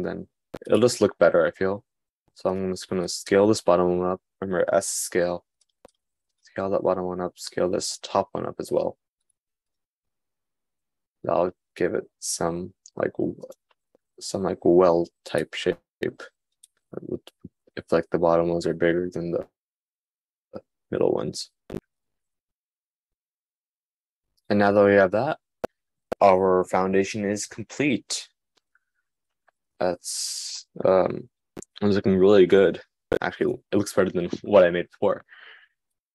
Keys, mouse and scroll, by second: 9.9 middle click.